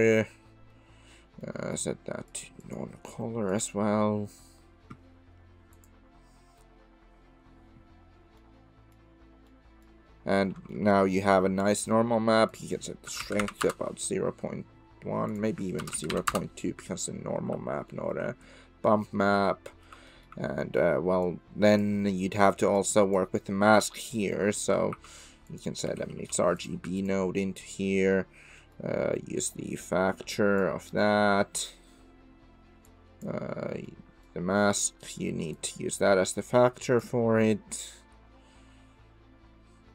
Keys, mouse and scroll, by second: 1.4 click, 2.3 click, 2.6-5.0 drag, 8.9 middle click, 9.5 middle click, 10.7 shift+drag, 11.1 middle click, 11.8 middle click, 12.5-14.2 middle drag, 15.3-16.8 middle drag, 17.9 shift+middle drag, 18.4-19.9 middle drag, 20.1 shift+middle drag, 20.7 middle click, 21.2 click, 22.7 click, 23.7 click, 24.5 middle click, 24.9 shift+a, 27.4-27.7 drag, 28.5 click, 29.8-30.7 drag, 33.1 click, 34.0 click, 34.7 click, 35.7-37.0 drag.